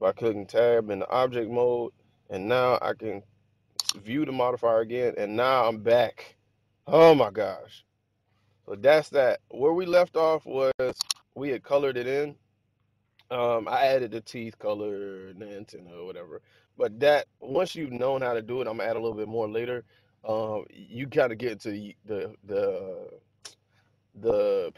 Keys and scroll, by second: 5.8 1, 7.5 super+s.